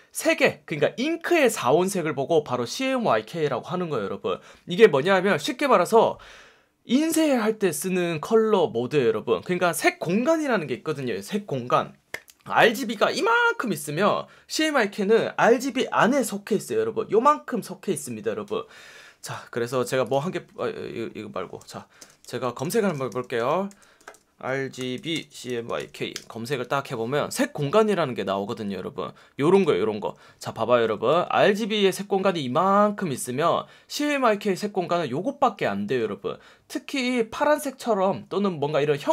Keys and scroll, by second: 21.9 alt+space, 22.0-26.2 typing, 26.6 Return, 31.0 F1, 35.8 F1, 36.9 F1.